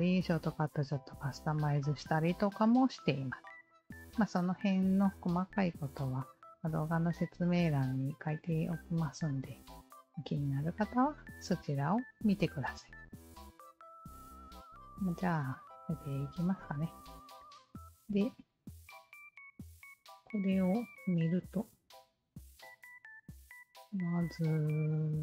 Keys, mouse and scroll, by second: 7.5-10.2 alt+drag, 15.6-16.5 alt+drag, 19.0 alt+click, 21.5 alt+click, 23.5-25.2 scroll down 6.